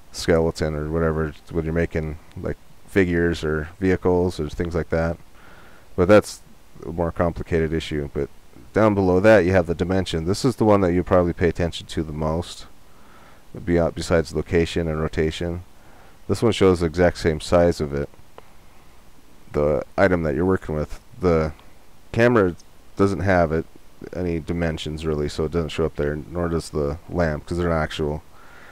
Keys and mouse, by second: 22.0-24.4 right drag, 26.3-28.7 right drag.